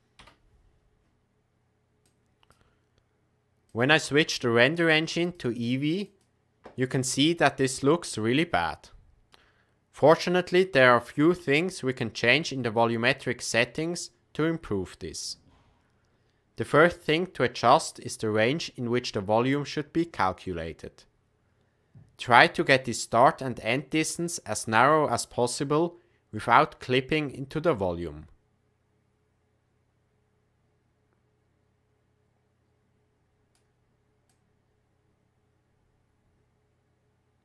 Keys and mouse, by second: 2.1 click, 4.4-5.0 drag, 5.2-6.5 drag, 8.1-9.3 shift+middle drag, 12.3 click, 24.7-33.5 drag, 34.2-37.4 drag.